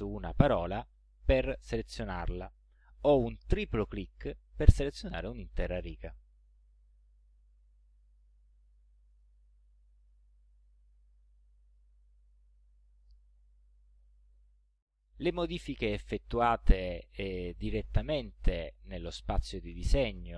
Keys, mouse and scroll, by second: 0.4 click, 3.5 click, 9.1 click, 10.0 click, 10.7-11.0 ctrl+scroll down 2, 11.7 ctrl+scroll up 1, 12.5 ctrl+click.